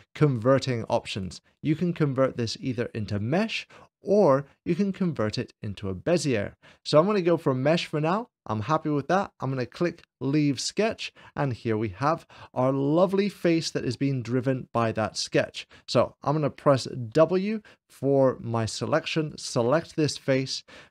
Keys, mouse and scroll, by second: 10.1-11.1 drag, 11.9-13.1 middle drag, 13.3-14.3 shift+middle drag, 17.2 w, 19.1-20.1 drag.